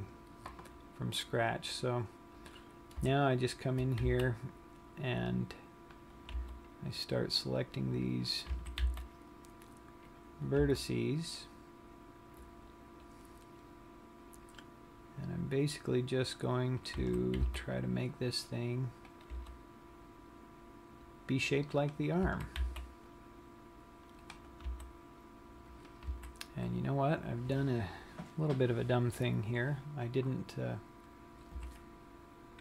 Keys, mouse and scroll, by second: 0.2 scroll down 1, 2.7 click, 3.7 shift+click, 4.8 c, 7.0 g, 8.7 click, 9.3 a, 9.6 c, 11.4 g, 17.3 click, 17.6 a, 18.1 c, 19.9 g, 22.8 click, 22.8 a, 23.3 c, 25.4 g, 26.6 click, 26.7 a, 32.2 a.